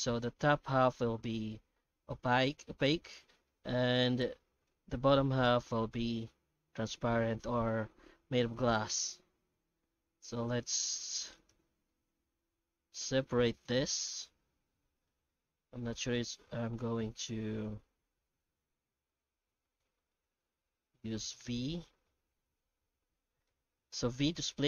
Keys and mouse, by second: 0.2 middle click, 3.6 shift+middle click, 4.1 alt+middle click, 5.9-7.3 shift+middle drag, 8.4 middle click, 8.9 2, 10.0 alt+a, 11.4 alt+shift+right click, 11.9-23.5 middle drag, 24.2 v.